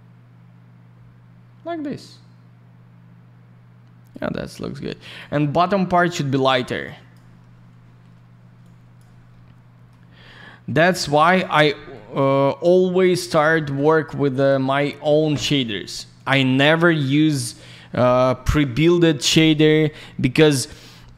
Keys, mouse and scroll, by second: 5.0 click, 5.1 click, 6.7 click, 8.6 click, 10.1-10.6 scroll up 1, 10.7 ctrl+click, 11.0 ctrl+click, 11.3 alt+middle click, 11.7 middle click, 12.6 click, 13.2 scroll down 1, 13.4 middle click, 14.0 shift+click, 16.1 click, 16.2 click, 16.9 click, 17.0 click, 19.6 click, 19.7 click.